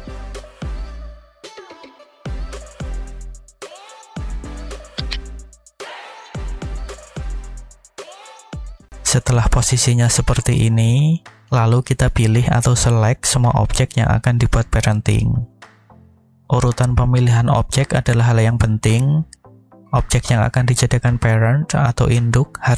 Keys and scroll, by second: 0.7 4, 1.7 Return, 3.3 shift+a, 5.3 g, 6.0 y, 6.7 -, 7.1 4, 7.6 Return.